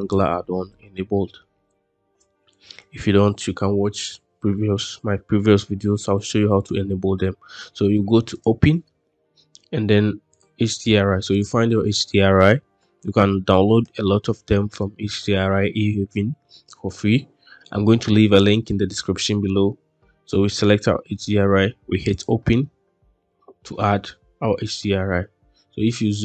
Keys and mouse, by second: 8.2-8.6 drag.